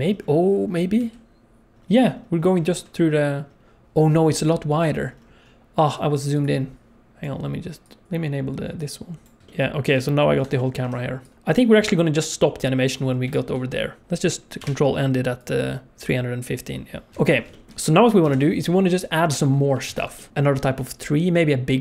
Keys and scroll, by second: 1.0 s, 1.7 alt+r, 14.6 ctrl+End, 17.1 ctrl+s, 17.1 alt+a, 17.1 ctrl+s, 18.2 n, 19.9 ctrl+s.